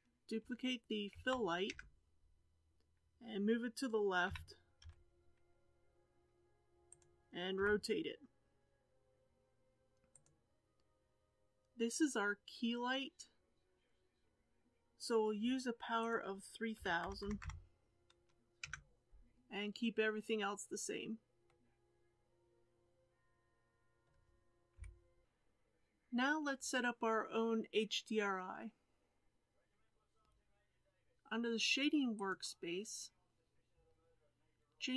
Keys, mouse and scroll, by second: 1.1 shift+d, 4.3 g, 7.6 r, 18.5 KP_0, 21.4-24.7 middle drag, 24.7 KP_1, 25.2-29.5 scroll down 2, 32.7 click.